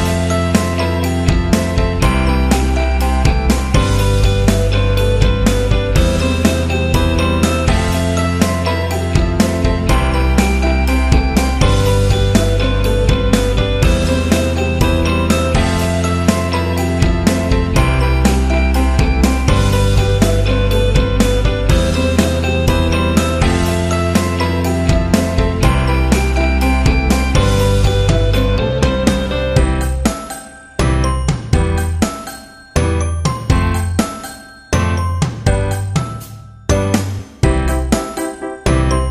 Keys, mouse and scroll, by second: 0.6 typing, 3.2 click, 5.6-6.1 scroll up 1, 6.1 click, 7.0 alt+scroll up 1, 7.8-15.1 drag, 16.5 alt+shift+click, 17.6-19.1 drag, 19.3 shift+click, 20.4-20.8 ctrl+scroll down 2, 21.5 ctrl+click, 24.0 alt+click, 25.5 click, 26.5 alt+scroll up 1, 27.2-28.1 ctrl+scroll down 1, 28.1-30.2 drag, 32.4 ctrl+z, 33.2 right click, 33.8-36.7 drag, 37.3 ctrl+scroll up 2, 38.1-38.9 alt+scroll down 2, 38.9-39.1 ctrl+scroll up 2.